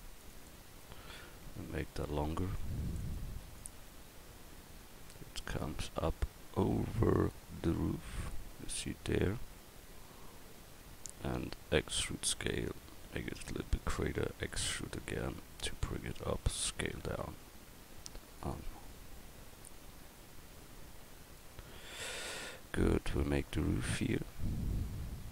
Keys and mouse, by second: 0.7 Tab, 1.9 a, 2.3 c, 11.8 e, 14.4 e, 15.4-16.5 drag, 16.5 s, 25.0 Tab.